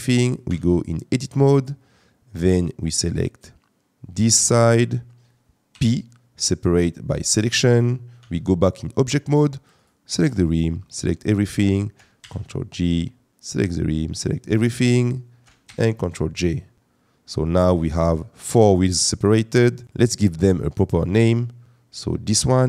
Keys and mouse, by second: 0.6 Tab, 1.5 click, 2.3 click, 5.7 p, 8.2 Tab, 8.7 click, 9.7 click, 12.2 ctrl+j, 14.1 shift+drag, 15.7 ctrl+j, 16.4 click, 19.8 click, 20.5 click.